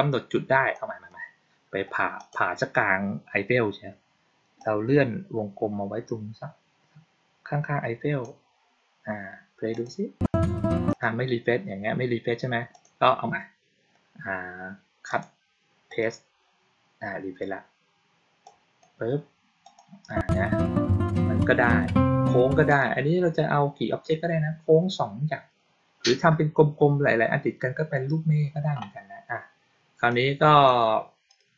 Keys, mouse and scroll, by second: 0.6-1.0 drag, 2.1 click, 4.5-8.1 drag, 9.6 click, 10.7 click, 12.6 click, 15.0 click, 15.8 click, 18.3-18.7 drag, 19.5 click, 22.6 click, 30.0-30.5 drag, 31.2 click.